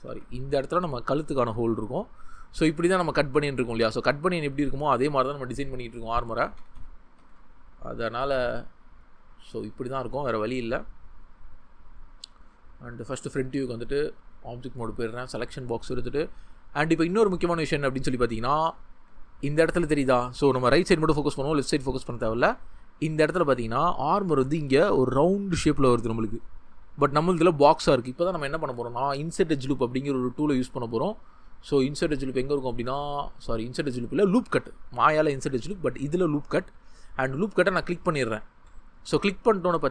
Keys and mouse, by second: 6.1-7.3 ctrl+z, 9.1-9.5 drag, 16.1-16.5 shift+middle drag, 18.0-18.3 shift+middle drag, 18.6-19.0 shift+middle drag, 20.1-20.4 shift+middle drag, 28.6 Tab, 37.5-37.8 drag, 38.6 ctrl+z.